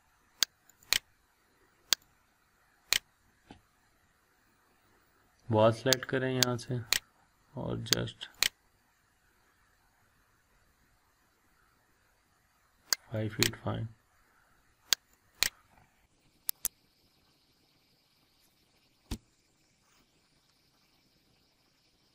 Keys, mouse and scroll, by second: 0.7-2.9 drag, 4.2-5.7 scroll up 1, 6.1 click, 13.2 click, 15.7 scroll down 1, 16.1-16.5 scroll up 1, 16.5 click, 16.7 scroll down 1, 16.8-17.1 scroll up 2, 17.1 scroll down 1, 17.5-17.9 scroll up 1, 20.0 scroll up 1, 20.1 scroll down 1, 20.3 scroll up 1, 20.6-21.2 scroll down 1, 21.2 scroll up 1, 21.8-22.1 scroll down 1.